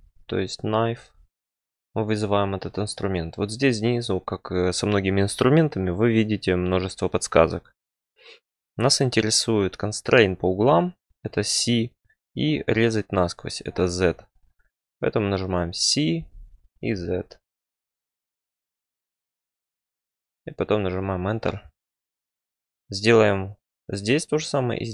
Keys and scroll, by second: 16.1-16.8 typing, 20.3 Return.